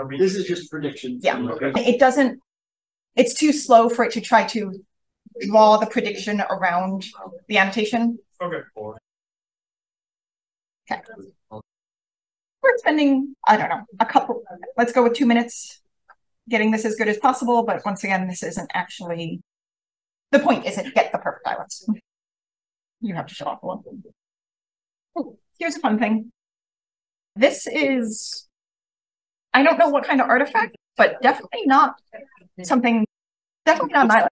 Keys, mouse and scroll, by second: 1.7-4.5 scroll down 1, 4.5-8.3 scroll down 1, 8.3-9.1 scroll down 1, 9.1-10.6 scroll up 3, 10.6-10.9 drag, 11.2 c, 13.4-19.4 drag, 20.2-21.6 scroll down 2, 21.6-23.3 scroll down 1, 22.5-22.8 drag, 23.3-24.6 scroll up 1, 23.6-24.6 drag, 24.6 scroll down 1, 24.7 scroll up 1, 25.8 c, 28.6 click, 28.9 c, 29.4 c, 30.9-31.2 drag, 31.2-32.7 scroll up 1, 31.7 c, 32.7-33.9 scroll up 1, 33.9-34.3 scroll up 1.